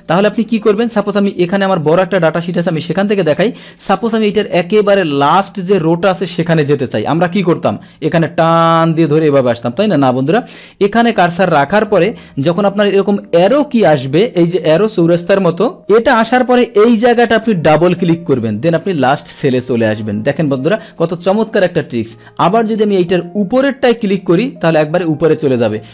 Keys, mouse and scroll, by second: 0.7 click, 1.9 click, 3.2 click, 3.9 click, 8.2-10.0 drag, 12.5 middle click, 15.7 middle click, 17.7 click, 23.8 click.